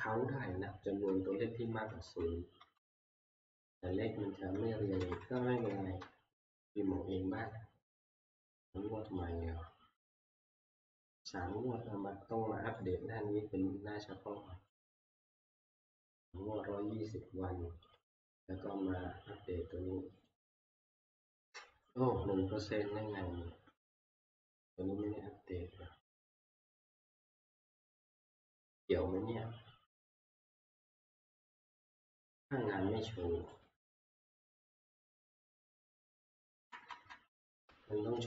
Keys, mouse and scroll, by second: 1.7 Left, 2.0 Left, 2.6 Left, 5.0 ctrl+Left, 5.4 ctrl+Left, 5.6 ctrl+Left, 6.0-6.9 Right, 9.2 click, 12.9 click, 14.8 click, 20.3 click, 24.8 click, 27.5 click, 33.6 click, 35.0 F2, 35.0 click, 36.0-38.2 Escape, 36.5 Right, 36.7 Right, 36.9 Right, 37.1 Right, 37.7 Right, 38.1 F2.